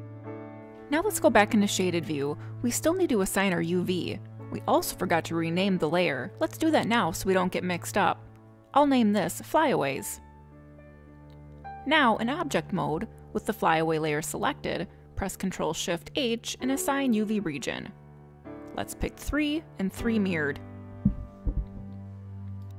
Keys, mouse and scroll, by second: 0.0 middle click, 0.1 alt+h, 0.1 scroll down 2, 0.2 click, 0.3 middle click, 0.4 click, 0.4 middle click, 1.7-4.7 scroll down 1, 6.9 click, 7.0 click, 10.0 a, 12.0 click, 14.9 click, 16.2 ctrl+shift+h, 19.7 click, 20.9 shift+click.